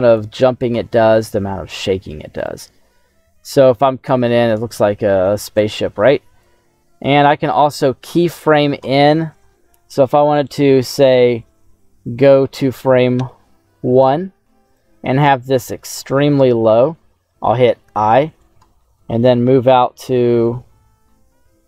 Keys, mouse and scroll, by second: 2.3 click, 5.6 click, 7.4 click, 12.0 click, 13.6 Right, 14.7-16.0 drag, 17.8 typing.